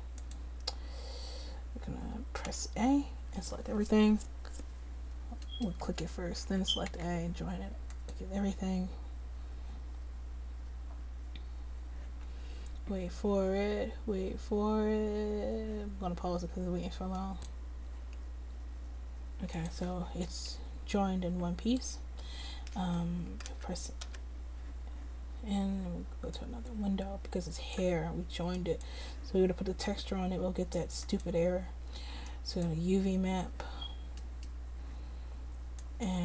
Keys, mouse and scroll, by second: 0.4-2.7 drag, 2.7 a, 6.0-8.0 drag, 6.6 a, 7.1 a, 19.8-21.1 drag, 21.1-23.6 middle drag, 23.6 n, 24.2 n, 26.4 click, 35.1 click, 36.0-36.2 middle drag.